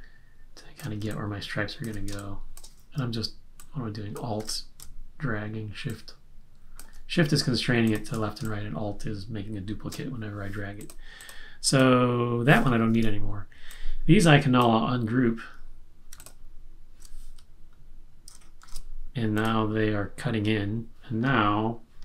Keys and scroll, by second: 3.5 space, 8.4 space, 12.9 BackSpace, 18.6 shift+super+g.